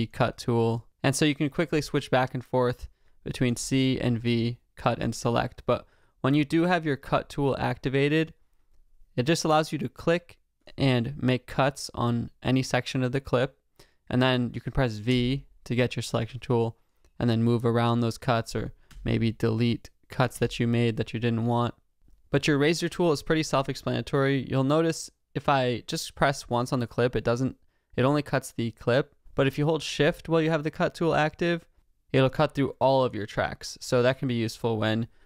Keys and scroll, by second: 18.9 BackSpace, 20.3 BackSpace.